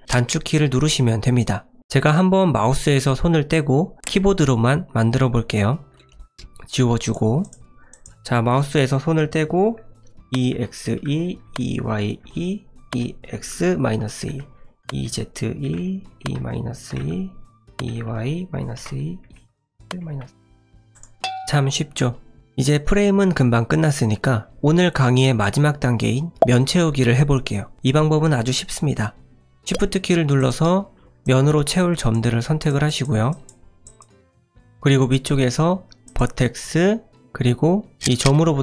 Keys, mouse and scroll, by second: 5.9 click, 6.1 click, 6.3 Delete, 7.4 click, 7.9 click, 16.4 typing, 30.4 click, 31.2 click, 32.7 click, 32.9 click, 33.3 shift+click, 36.1 click.